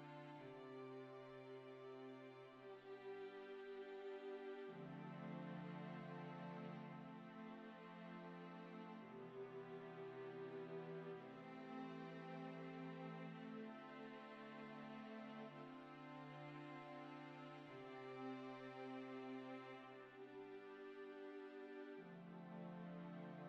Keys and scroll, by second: 3.9 0, 4.1 Return, 6.9-7.3 Up, 7.7 Up.